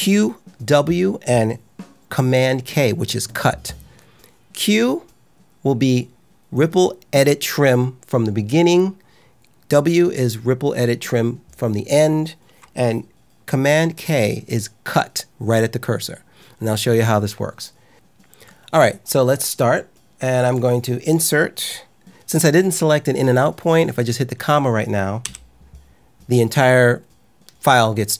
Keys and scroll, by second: 25.1 ,.